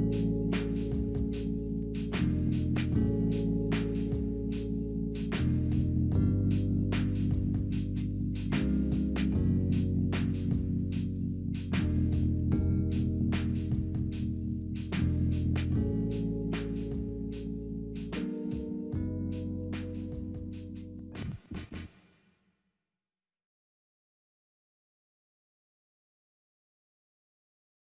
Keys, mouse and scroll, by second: 0.6 scroll up 2, 1.1-1.7 scroll down 3, 1.7-2.0 scroll up 2, 2.0 scroll down 3, 2.4 scroll up 2, 2.6 scroll down 3, 5.5 double click, 5.9-6.8 typing, 8.1-8.9 scroll up 1, 8.9 scroll down 2, 11.6 scroll up 2, 12.1-12.9 scroll down 2, 18.0 right click.